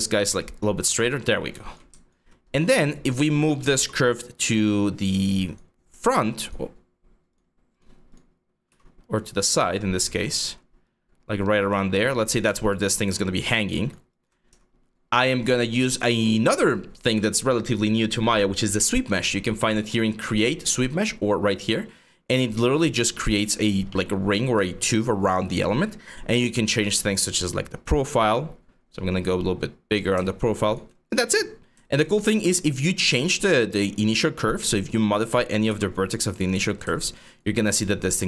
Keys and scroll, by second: 0.7 5, 2.1 4, 3.4 w, 8.3-9.9 typing, 14.1 e, 31.7 4, 35.3 w, 36.3 w.